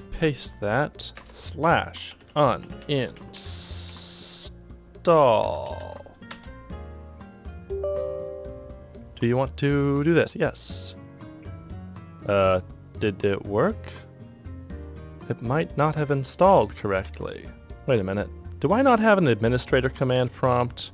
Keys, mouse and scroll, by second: 0.4 ctrl+v, 1.6-4.4 typing, 5.6-6.8 typing, 10.5 Return, 17.7 Right, 17.7 BackSpace.